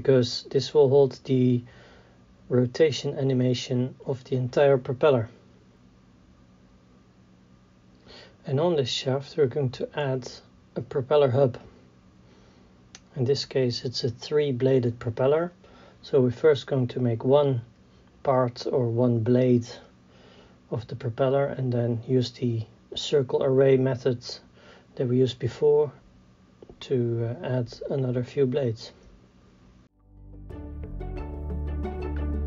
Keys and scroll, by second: 0.3 g, 0.7 y, 2.2 e, 2.9 Tab, 4.1 e, 4.5 y, 9.2 s, 11.6 g, 12.0 y, 16.1 KP_3, 17.4 s, 19.5 Tab, 23.6 e, 26.5 z, 29.9-32.2 typing, 32.3 Tab.